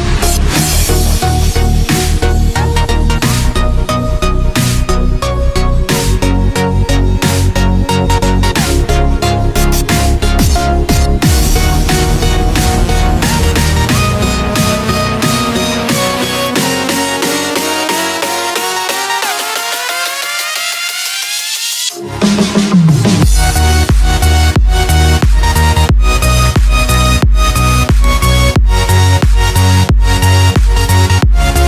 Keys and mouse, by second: 0.7 s, 4.9-5.7 middle drag, 7.9 ctrl+r, 13.4-14.0 middle drag, 14.2-15.5 shift+middle drag, 17.1 click, 18.9 ctrl+r, 26.7 Tab, 29.4 Tab.